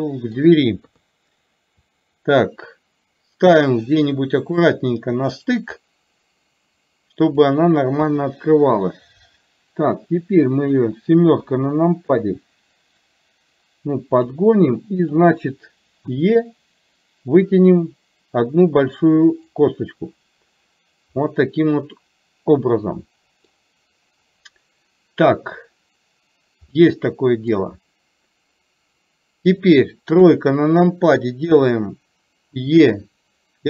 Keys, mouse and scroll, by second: 0.9 KP_3, 2.1-4.7 drag, 5.6-7.4 drag, 8.1 KP_1, 9.8-10.8 drag, 11.4 KP_7, 13.1-14.3 drag, 15.2 click, 21.2-23.6 middle drag, 26.8 middle click, 29.6 click, 30.2 KP_3, 32.7 e.